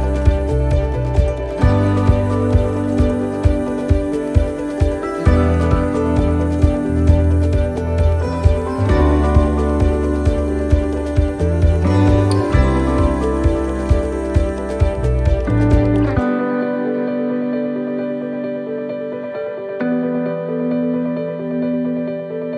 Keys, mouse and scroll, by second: 0.9 click, 3.4 middle click, 4.1 shift+d, 5.3 click, 10.7 middle click, 11.2 shift+middle click, 11.8 middle click, 12.2 scroll down 4, 13.0 shift+middle click, 13.4 scroll up 2, 16.9 click, 19.0 right click, 19.9 l, 20.9 click.